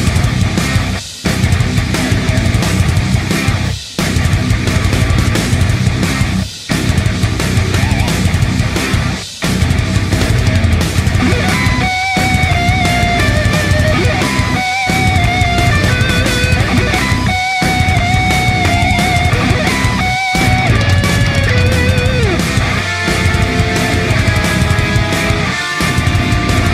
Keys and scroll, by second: 1.4-2.1 typing, 10.3 ctrl+d, 10.7 ctrl+d, 10.9 ctrl+d, 11.1 ctrl+d, 11.2 ctrl+d, 11.4 ctrl+d, 11.5 ctrl+d, 11.7 ctrl+d, 11.9 ctrl+d, 12.0 ctrl+d, 12.2 ctrl+d, 20.9 d, 23.5-24.1 typing, 25.4-26.1 typing.